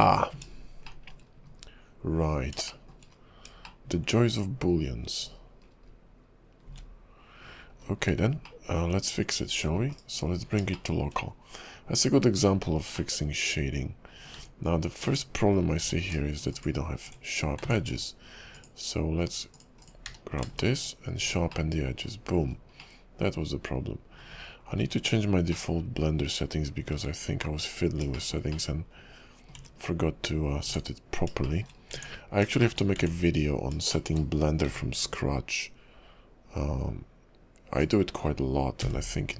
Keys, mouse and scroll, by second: 1.0 shift+middle click, 1.3 scroll down 1, 1.5 KP_5, 2.5-2.8 scroll down 2, 2.8 shift+middle click, 3.0-3.5 shift+scroll up 3, 3.8 shift+middle click, 4.7 KP_5, 5.3 KP_5, 5.8-6.6 scroll down 6, 6.7 `, 7.6-8.2 scroll up 8, 8.6 shift+middle click, 9.9 /, 10.5 scroll up 2, 10.9 shift+middle click, 11.3-13.1 scroll down 2, 13.1 middle click, 15.0 Tab, 15.8 q, 17.6 ctrl+`, 20.0 q, 21.7 middle click, 22.5-22.9 scroll up 1, 22.9 middle click, 24.8 scroll down 4, 25.7 middle click, 25.7 `, 28.3 shift+middle click, 28.6 middle click, 30.5 scroll up 2, 30.5 `, 30.7 Tab, 31.6 shift+middle click, 31.9-32.3 scroll up 2, 32.0 Tab, 32.6 shift+scroll up 1, 32.7 shift+middle click, 33.0 Tab, 33.6 scroll down 2, 34.1 shift+middle click, 34.6 k.